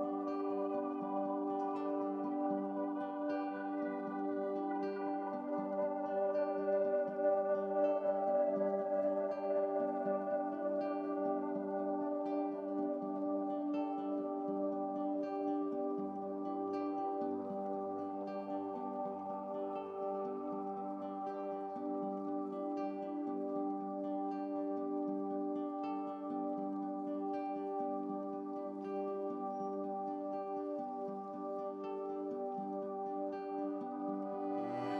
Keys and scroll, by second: 3.3 ctrl+z, 25.2 ctrl+z, 27.0 ctrl+z, 29.1 ctrl+z, 31.8 ctrl+z, 33.9 ctrl+z.